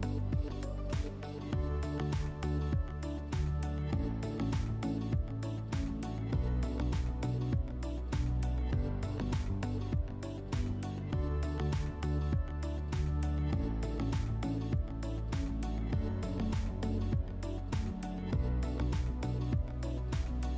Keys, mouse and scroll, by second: 1.8-2.7 drag, 2.7 right click, 3.4 right click, 3.9-5.4 drag, 5.9-6.7 drag, 8.2 click, 10.0-11.6 drag, 13.2 click, 16.3 click, 17.4 click, 18.6 click, 19.9 click.